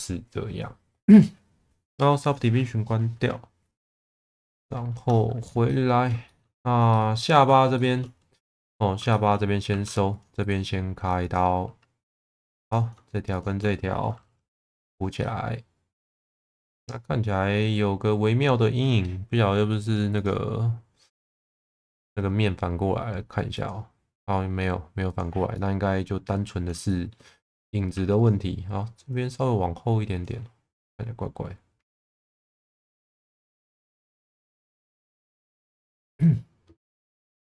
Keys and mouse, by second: 2.2 click, 4.9 Tab, 5.6 middle click, 6.3 shift+middle click, 6.9 middle click, 7.7 shift+middle click, 8.5 middle click, 9.1 shift+middle click, 9.6 2, 12.0 2, 12.7 click, 13.3 shift+click, 14.5 f, 15.2 middle click, 16.6-18.5 middle drag, 20.3 click, 22.0-25.3 drag, 25.5 middle click, 26.9 shift+middle click, 27.9 2, 28.2 click, 29.1 click, 30.7-32.3 middle drag, 32.6 shift+middle click, 34.1 click, 35.0 Tab, 35.6 Tab, 36.2 middle click, 36.9 1.